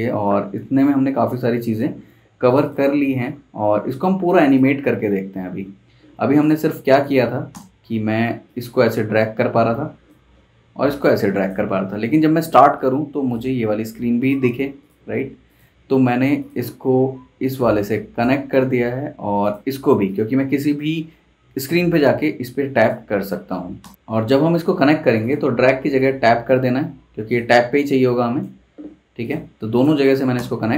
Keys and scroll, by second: 5.1 super+s, 7.5 super+Return, 14.5 super+s, 23.8 super+Return, 30.3 super+Return.